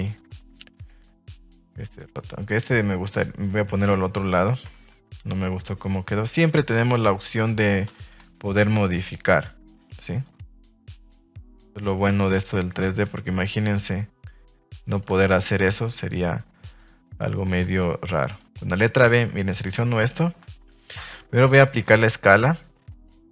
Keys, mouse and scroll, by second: 0.1 shift+middle click, 3.4 z, 4.3 a, 6.2 Tab, 7.8 a, 7.9 a, 8.1 b, 10.2 click, 12.1 r, 12.3 s, 12.8 click, 13.0 g, 14.8 click, 15.0 Tab, 15.3 z, 16.0-16.8 middle drag, 17.1 middle click, 17.4 Tab, 18.3 alt+right click, 20.7 Tab, 21.0 \, 21.6 ctrl+a.